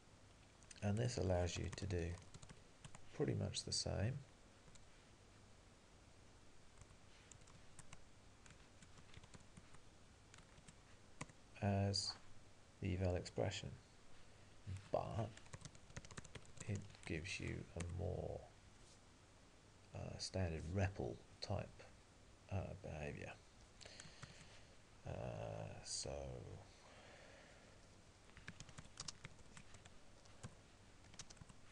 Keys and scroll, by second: 2.9 Tab, 2.9 Return, 6.9 q, 7.9 Tab, 9.6 Tab, 11.2 Return.